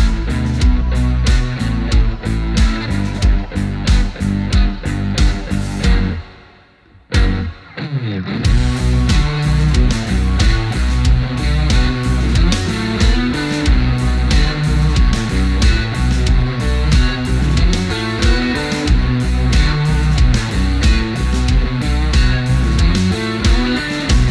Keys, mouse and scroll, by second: 0.1 right click, 1.3 click, 3.0 alt+scroll up 1, 4.5-24.3 drag.